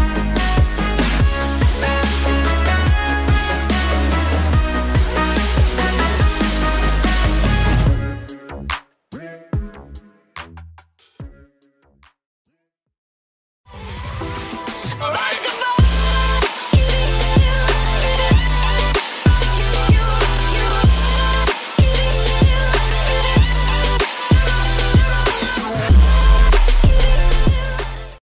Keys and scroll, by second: 3.2 space, 9.9 alt+space.